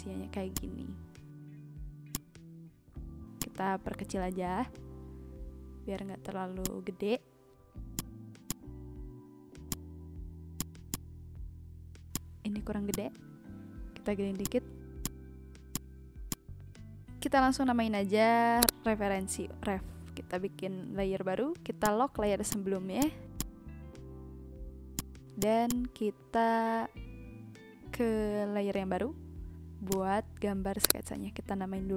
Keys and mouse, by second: 0.5 click, 2.1 click, 3.4 click, 5.8 click, 6.6 shift+click, 7.9 shift+click, 8.4 click, 9.6 click, 10.5 click, 12.1 shift+click, 12.9 shift+click, 14.4 click, 17.1 a, 18.6 click, 19.3 r, 19.5 f, 20.3 Return, 22.8 click, 24.9 click, 29.8 click, 30.8 click.